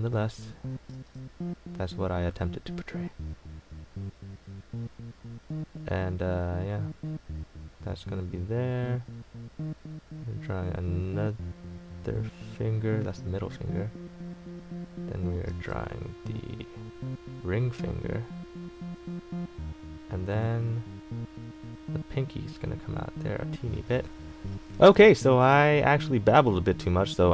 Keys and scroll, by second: 1.1 ctrl+z, 15.7 ctrl+z, 23.8 a.